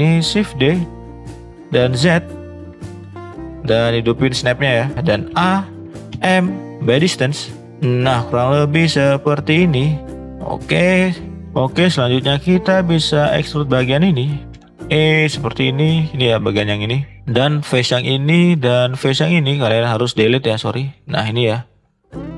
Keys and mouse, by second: 0.6 shift+d, 5.3 a, 6.1 m, 8.5 click, 8.9-11.4 middle drag, 13.0 shift+click, 13.7 shift+middle click, 14.5 e, 17.8 click, 18.3-18.6 middle drag, 20.3 ctrl+z, 21.1 middle click.